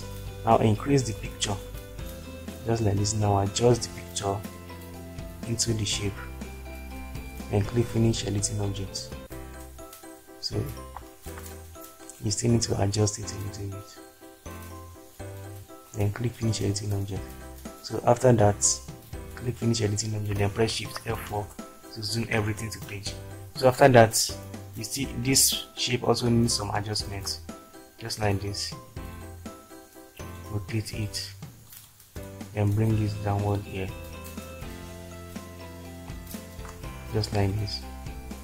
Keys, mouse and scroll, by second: 1.4 shift+click, 21.5 shift+F4.